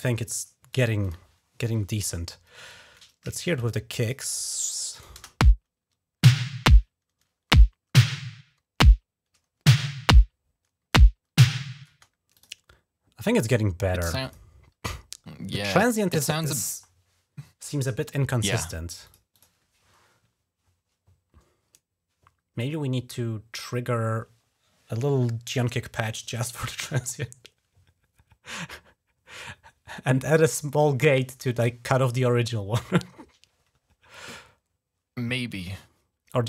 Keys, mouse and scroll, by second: 0.5 click, 3.3 click, 3.8 click, 4.6 click, 4.9 click, 5.1 space, 11.7 space, 12.1 click, 14.0 click, 14.2 click, 18.8 click, 19.0 click.